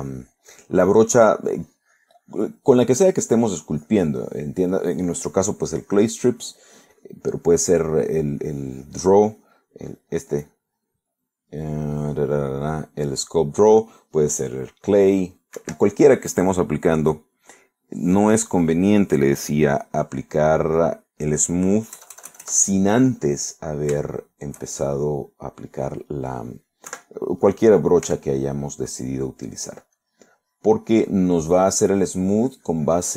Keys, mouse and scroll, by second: 0.5-1.7 drag, 1.8 middle click, 2.6-4.1 drag, 4.2 middle click, 4.8 click, 5.9-7.3 drag, 7.4 middle click, 8.0-9.4 drag, 9.5 click, 10.0 middle click, 10.6 middle click, 11.5 click, 16.6 Escape, 17.3 right click, 21.3 click, 21.8 middle click, 22.5 middle click, 23.0 KP_Add, 25.1 shift+middle click, 26.1 middle click, 28.0 3, 29.1 f, 30.7 click, 31.9 click, 32.5 middle click.